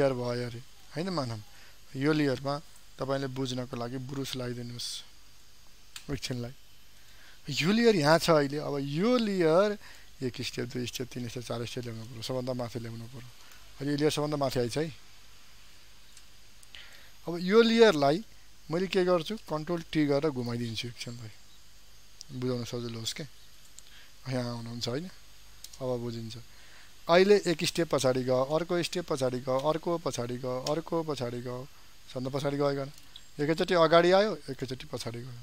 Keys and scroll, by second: 19.5 ctrl+t, 27.5 ctrl++.